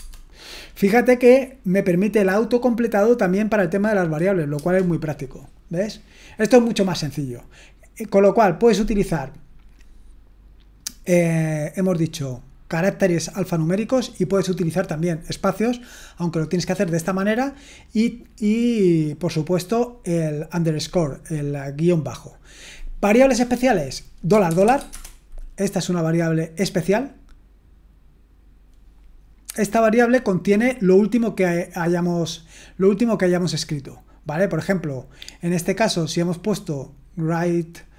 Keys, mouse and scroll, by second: 0.0-0.2 typing, 4.5 Return, 10.4-17.2 scroll down 1, 17.2-19.2 scroll down 1, 19.2-19.9 scroll down 1, 19.9-21.8 scroll down 1, 21.8-22.7 scroll down 1, 22.7-23.3 scroll down 1, 23.3-24.3 scroll down 1, 24.3 scroll down 1, 24.5-24.9 typing.